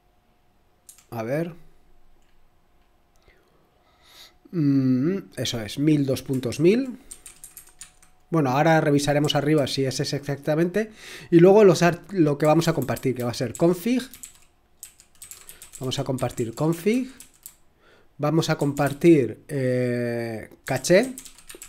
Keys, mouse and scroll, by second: 0.9 0, 2.5-4.9 scroll up 1, 4.9-6.4 scroll down 1, 6.5-9.7 typing, 12.0-19.3 typing, 20.3-21.6 typing.